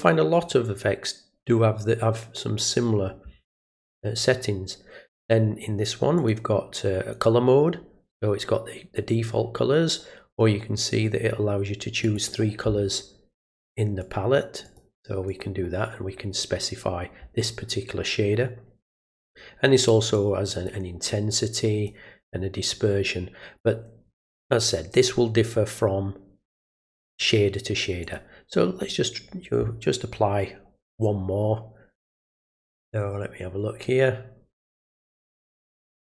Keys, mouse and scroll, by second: 6.2 click, 12.0 click, 13.5 click, 14.0 click, 14.7 click, 15.3 click, 20.2 click, 21.3 click, 22.3-23.6 drag, 28.0 click.